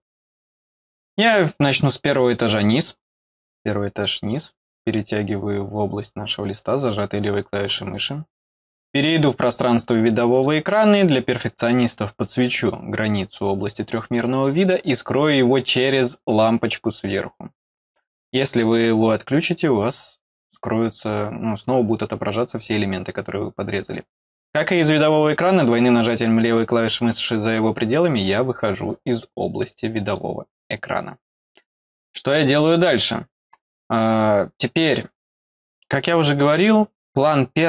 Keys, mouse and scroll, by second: 1.0 click, 2.3 click, 3.0-4.0 drag, 6.4 click, 9.4 click, 9.5 click, 10.3 click, 14.7 click, 17.0 click, 25.5 click, 25.7 click, 30.0 click, 31.9 click.